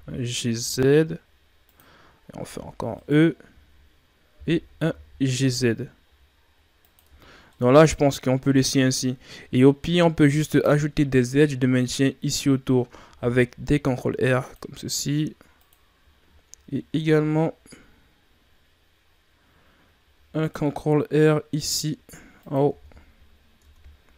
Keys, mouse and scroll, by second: 2.5 e, 4.3 g, 7.0 Tab, 7.4 middle click, 8.3 scroll up 1, 8.5 Tab, 10.4 click, 13.3 ctrl+r, 16.8 ctrl+r, 22.7 Tab, 23.6 Tab.